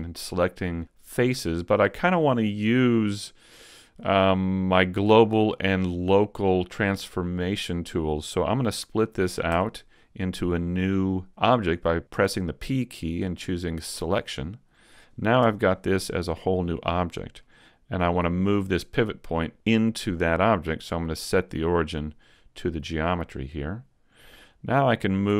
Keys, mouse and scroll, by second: 9.5 p, 15.4 Tab, 16.1 right click, 17.4 middle click, 21.6 click, 24.5 click.